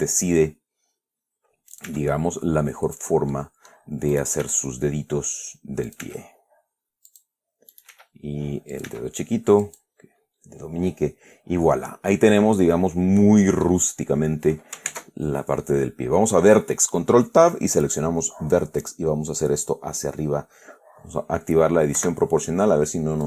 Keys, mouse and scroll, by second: 2.0 click, 2.2 e, 3.2 click, 3.6 middle click, 4.4 right click, 4.7 e, 6.2 click, 6.3 e, 7.4 click, 8.0 right click, 8.2 e, 9.0 click, 9.2 e, 9.9 click, 10.3-10.7 scroll down 2, 10.9 scroll down 2, 11.2-14.1 middle drag, 14.3 scroll up 2, 15.2 ctrl+Tab, 18.1 click, 19.1 right click, 22.3 o.